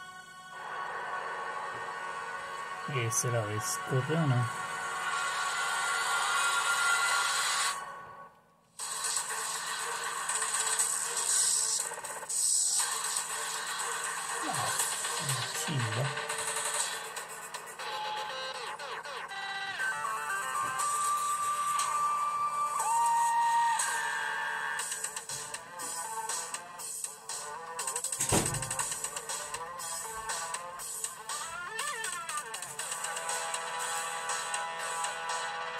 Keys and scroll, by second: 8.6 super+3, 15.4 super+4, 17.8 super+5, 20.0 super+6, 20.9 super+7, 21.7 super+8, 22.9 super+9, 29.7 super+2.